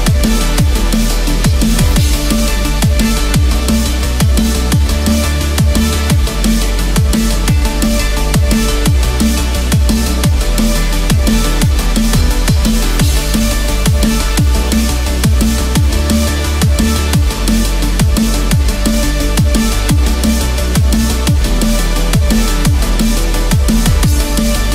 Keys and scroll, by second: 14.7 ctrl+z.